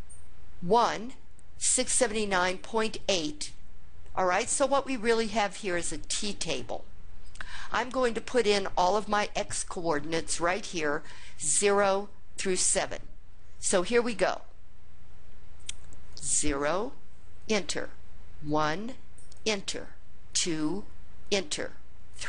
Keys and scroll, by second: 15.9 0, 17.2 Return, 18.3 1, 19.2 Return, 20.1 2, 21.1 Return, 21.9 3.